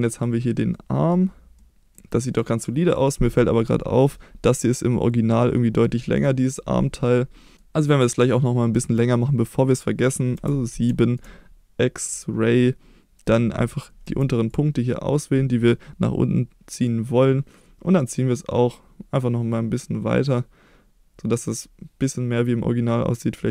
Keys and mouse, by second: 0.7-1.1 middle drag, 1.5 middle click, 1.9-2.2 middle drag, 5.8-7.6 middle drag, 8.1-9.6 middle drag, 10.3 KP_7, 10.9 shift+middle click, 11.9 click, 14.0 1, 14.5 click, 16.9-23.5 drag.